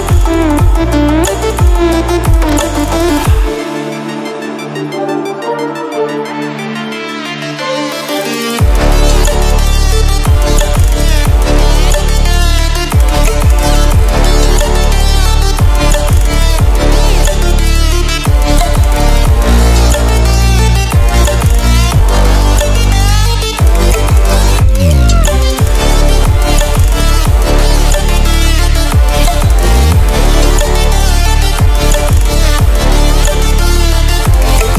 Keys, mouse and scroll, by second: 0.2-1.1 drag, 3.1 ctrl+alt+scroll down 1, 6.5-6.9 ctrl+alt+scroll up 1, 8.8 click, 13.2 click, 18.9 ctrl+alt+scroll down 1, 21.0 click, 24.4 ctrl+alt+scroll up 1, 26.0 click, 26.8-28.6 drag, 30.8 ctrl+alt+scroll down 1, 32.5-32.8 ctrl+alt+scroll down 1, 32.8 ctrl+alt+scroll up 1.